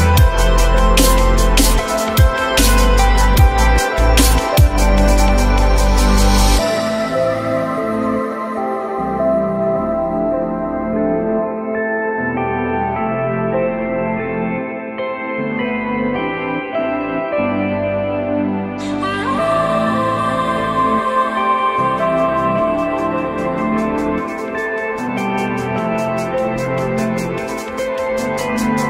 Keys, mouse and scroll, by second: 0.3 F4, 1.4 alt+middle click, 2.3 ctrl+z, 4.3 F4, 5.1 alt+middle click, 5.9 alt+middle click, 6.4 alt+middle click, 7.2 alt+middle click, 8.6 alt+middle click, 9.1 alt+middle click, 9.4 alt+middle click, 9.8 alt+middle click, 11.9 F3, 12.4 F3, 15.6 ctrl+click, 16.2 shift+click, 17.1 ctrl+click, 18.7 F3, 19.3 F4, 21.2 alt+middle click, 21.7 alt+middle click.